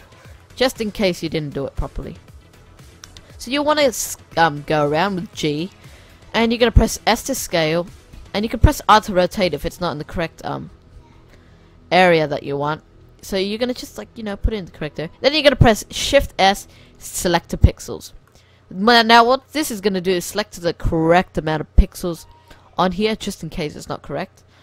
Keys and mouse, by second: 0.9 g, 2.5 s, 3.3 g, 6.2 g, 6.7 s, 8.4 r, 11.1 ctrl+z, 11.7 g, 13.2 g, 14.7 shift+s, 18.4-21.2 middle drag.